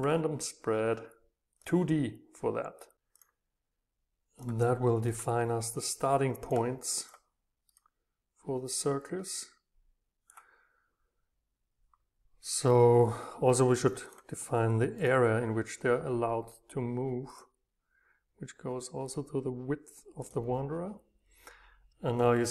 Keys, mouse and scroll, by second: 1.6-3.0 drag, 3.2-7.6 drag, 8.7 right click, 9.6-12.2 drag, 14.1-15.8 drag, 15.8-17.0 middle drag, 20.3-22.4 drag.